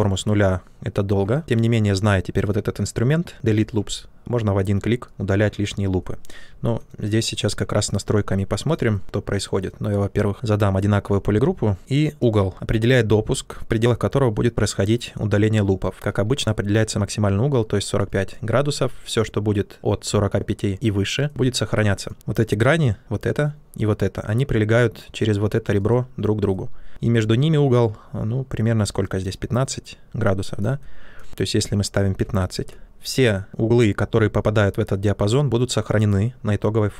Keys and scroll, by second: 3.7 typing, 6.9 ctrl+z, 10.3 ctrl+w, 11.8 ctrl+z, 31.7-32.6 typing.